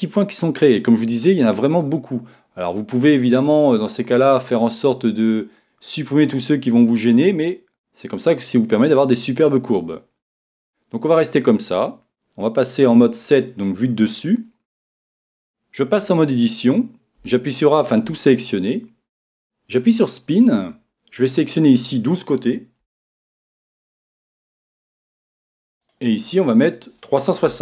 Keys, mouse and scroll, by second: 3.7-10.5 middle drag, 4.4-5.5 scroll down 1, 5.5-6.6 scroll down 1, 10.5 Tab, 12.9 KP_7, 14.9 Tab, 17.2 a, 20.0-25.8 drag, 26.7-27.6 drag.